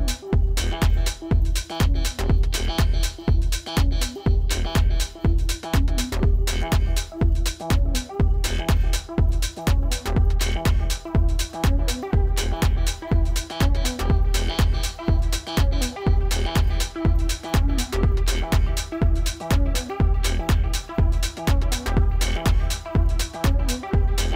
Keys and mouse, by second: 13.0 click, 14.5 ctrl+=, 15.9 ctrl+-, 16.9 =, 18.3 click, 22.6-23.8 typing.